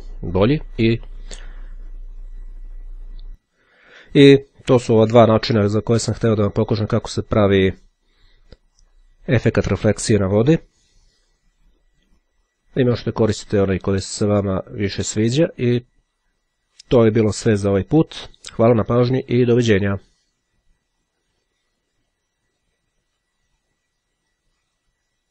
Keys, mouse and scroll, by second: 3.3 click, 9.1 click, 14.0-16.8 drag, 21.3 click, 22.7 click.